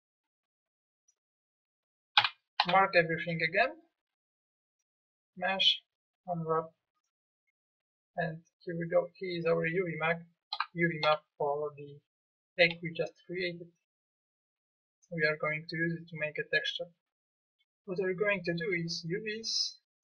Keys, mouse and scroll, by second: 2.2 a, 2.6 a, 9.2 middle click, 10.5 a, 11.0 a.